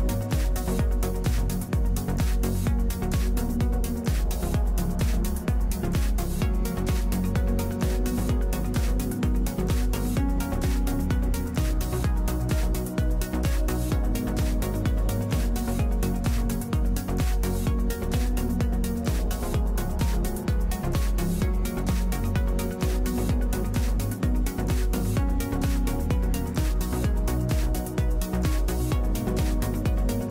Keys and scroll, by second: 4.7 t, 16.0 Escape, 19.1-20.8 typing, 27.7 \, 28.9 p.